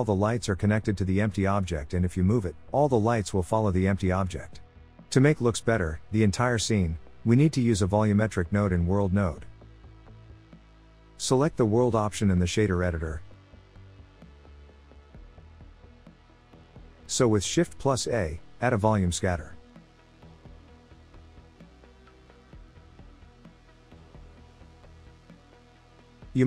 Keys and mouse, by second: 0.2-2.7 drag, 7.8-9.5 drag, 11.2-13.0 drag, 14.4 middle click, 15.9 z, 16.3 click, 17.3 click, 18.1 click, 19.0 shift+a, 22.7 BackSpace, 24.1-25.1 drag.